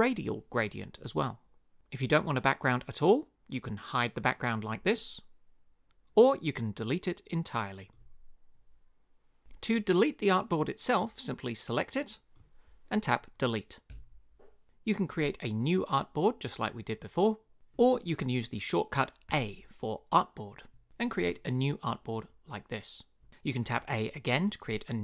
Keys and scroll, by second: 13.9 BackSpace, 19.3 a, 23.8 a.